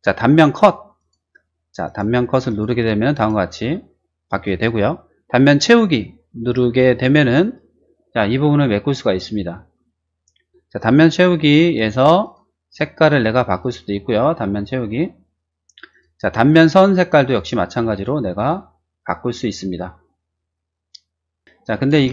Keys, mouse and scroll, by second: 0.9 click, 1.8 click, 2.4 click, 3.1 click, 7.0 click, 10.7 click, 12.2 click, 12.7 click, 13.6 click, 15.9 click, 17.3 click, 18.3 click, 19.0 click, 21.4 shift+middle click, 21.9 shift+space, 22.0 middle click.